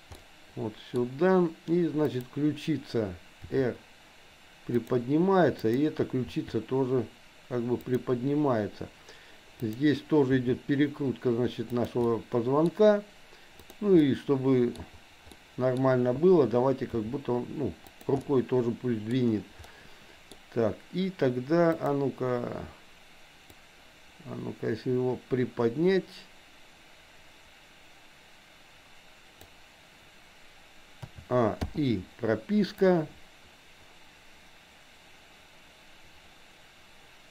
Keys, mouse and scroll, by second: 0.1 middle click, 2.1 click, 3.5 r, 5.6 click, 6.1 r, 9.6 click, 10.4 r, 12.1 middle click, 13.6 click, 14.0 middle click, 15.4 middle click, 17.0 g, 18.3-19.3 middle drag, 19.6 scroll up 1, 19.8 middle click, 21.8 click, 23.6-29.5 drag, 31.0 a, 31.8 i, 32.9-37.3 drag.